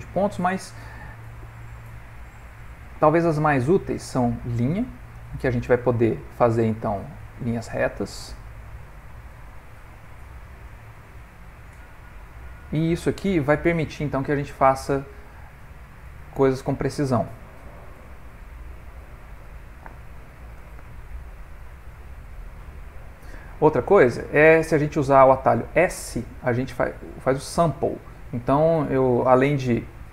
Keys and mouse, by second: 5.2 click, 6.5 middle click, 7.4 click, 8.7 click, 9.9 middle click, 14.4 click, 15.5 click, 16.8 middle click, 17.7 click, 19.1 click, 20.1 middle click, 20.7 ctrl+middle click, 20.8 ctrl+middle click, 21.3 middle click, 23.7 ctrl+middle click, 24.2 shift+middle click, 24.7 ctrl+middle click.